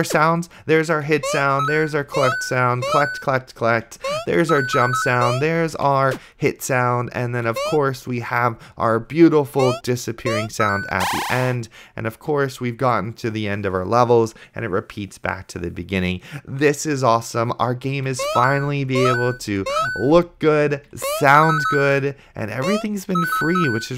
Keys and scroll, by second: 1.5 a, 3.3-5.4 typing, 7.8 space, 18.3 a, 18.4 space, 20.2 d, 21.3 space, 22.9 space.